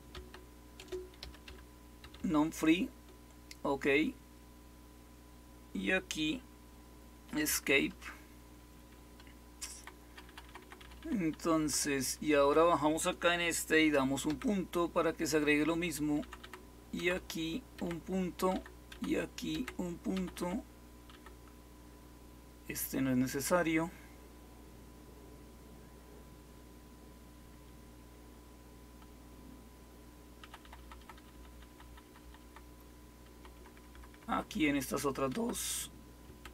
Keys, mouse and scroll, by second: 0.0-2.1 typing, 7.4 Escape, 7.6 Escape, 7.8 Escape, 9.6 Left, 10.0 Left, 10.2 Left, 10.4 Left, 10.6 Left, 10.9 Left, 11.5 Down, 12.3 Right, 14.2 ., 16.1 Down, 16.3 typing, 16.3 Down, 16.9 Right, 17.1 Right, 17.7-21.2 typing, 30.3 Down, 30.5 Down, 30.7 Down, 30.9 Down, 31.1 Down, 31.4 Down, 31.6 Down, 31.9 Down, 32.1 Down, 32.3 Down, 33.2 Up, 33.5 Up, 33.7 Up, 33.8 Up, 34.0 Up, 35.2 Right, 36.2-36.5 typing.